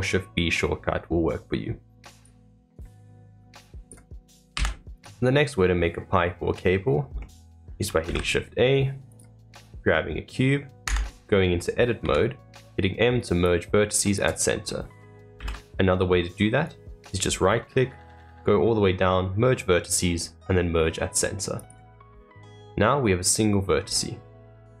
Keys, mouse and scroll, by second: 5.7-8.0 middle drag, 8.0 shift+a, 9.6-10.8 middle drag, 10.8 Tab, 14.6 middle click, 15.3 ctrl+z, 18.0-19.8 right drag, 22.0-22.4 scroll up 2, 22.4-23.8 middle drag, 23.8-24.8 scroll down 2.